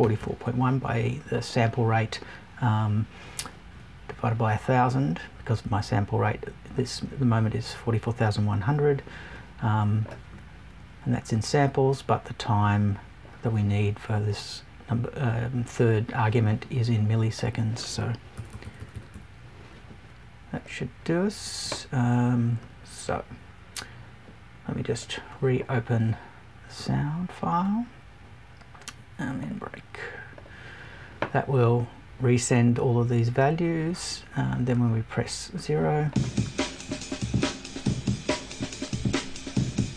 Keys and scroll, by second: 18.3 Right.